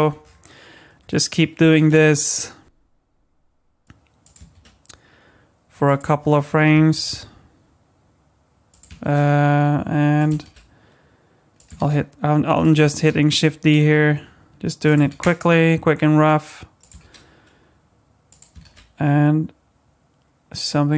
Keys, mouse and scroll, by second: 0.7-1.8 scroll up 5, 1.8 shift+d, 4.5 shift+d, 6.9 shift+d, 9.0 shift+d, 10.4 shift+d, 11.8 shift+d, 12.9 shift+d, 15.1 shift+d, 17.2 shift+d, 18.6 shift+d.